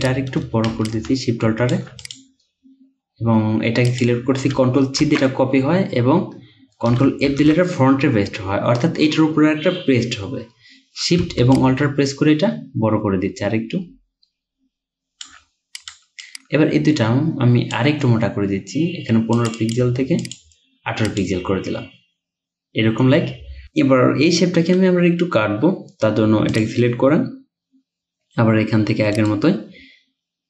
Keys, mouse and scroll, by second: 0.9 alt+shift+click, 5.1 ctrl+c, 7.3 ctrl+f, 11.6 alt+shift+click, 16.3 double click, 19.6 double click, 29.2 right click.